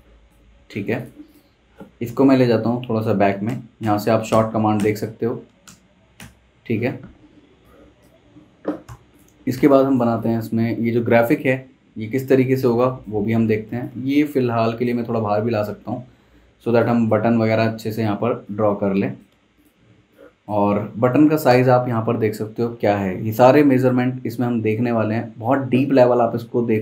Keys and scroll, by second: 0.6 super+z, 3.8 super+[, 4.3 super+[, 5.7 super+], 6.2 super+[, 7.2 z, 8.9 v, 9.5 space, 13.5 super+z, 15.6 super+z, 19.8 z, 19.9 z, 21.5 v.